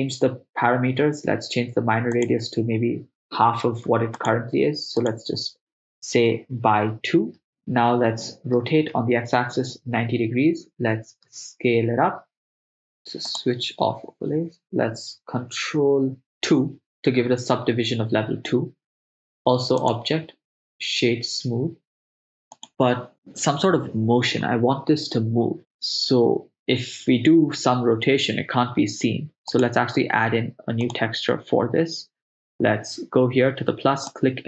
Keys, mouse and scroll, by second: 2.2-7.4 drag, 8.9 r, 8.9 x, 9.6 9, 9.7 0, 10.1 Return, 11.3 s, 13.3 click, 14.6 right click, 16.7 ctrl+2, 19.8-22.7 drag, 29.5 click, 30.9 click, 34.1-34.4 drag.